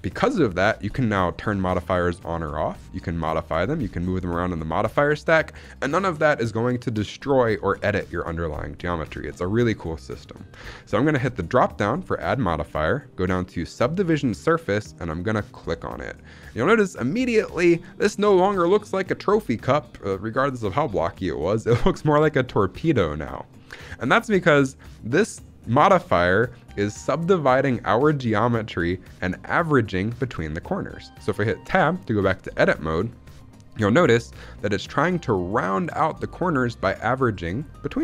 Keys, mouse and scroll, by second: 11.4-16.5 drag, 16.7 shift+middle click, 16.9-17.4 scroll up 1, 17.4 scroll down 1, 17.5 scroll down 1, 17.7 shift+middle drag, 22.4 scroll up 1, 22.7-23.9 shift+middle drag, 24.1-25.4 scroll up 2, 31.5 Tab, 32.3 scroll down 1, 32.6 shift+middle click.